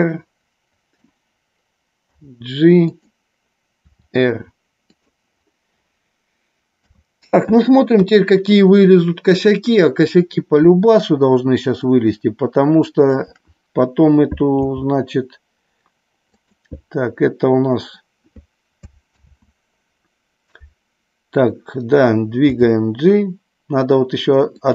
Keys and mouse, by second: 2.2 g, 2.8 click, 3.7 r, 4.8 click, 6.8 KP_3, 8.0 KP_1, 11.8-13.1 shift+drag, 14.6 g, 16.3 click, 19.1 ctrl+z, 22.4 g, 24.6 click.